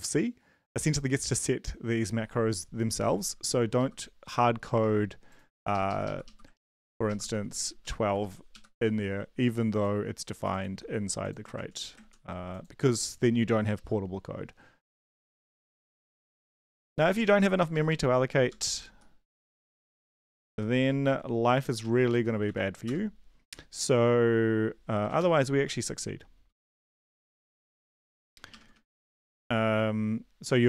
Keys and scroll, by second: 3.6 Left, 3.7 Left, 5.7 Left, 6.2 Left, 7.1 ctrl+shift+Left, 7.3 ctrl+x, 7.7-8.1 typing, 8.5 Right, 11.5 ctrl+z, 12.0 ctrl+z, 13.4 Left, 13.7 Left, 14.6-17.8 typing, 17.9 Right, 18.5 Up, 18.8 ctrl+Right, 19.2-19.9 typing, 20.0 ctrl+Left, 20.1 ctrl+Left, 20.3 ctrl+Left, 21.0 Down, 21.4 Right, 21.8-22.6 typing, 22.8 Return, 25.1 typing, 26.5-27.3 typing, 28.5-29.2 typing.